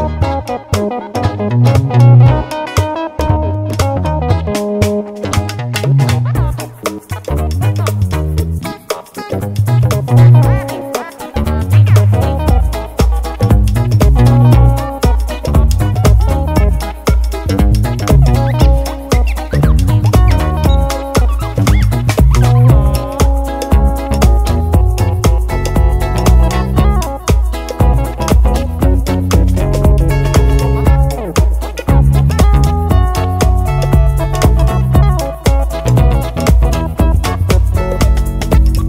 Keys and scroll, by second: 9.7 Left, 23.2 super+d.